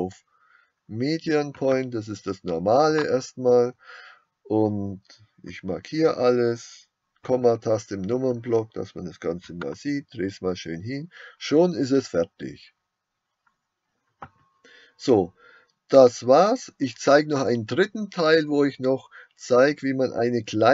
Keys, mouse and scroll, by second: 3.1 click, 5.5 a, 7.3 KP_Decimal, 9.7-15.6 middle drag, 18.8-19.9 middle drag.